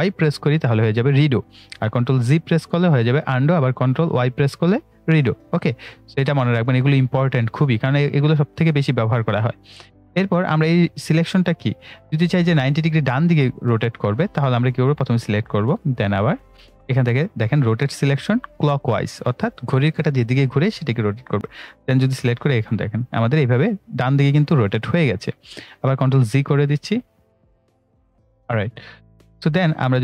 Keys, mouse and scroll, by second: 0.0 ctrl+y, 2.3 ctrl+z, 4.3 ctrl+y, 5.7 ctrl+z, 6.8-12.3 drag, 14.8 click, 21.3-26.4 drag, 25.8 ctrl+Num_Lock, 26.4 ctrl+z, 28.5 click.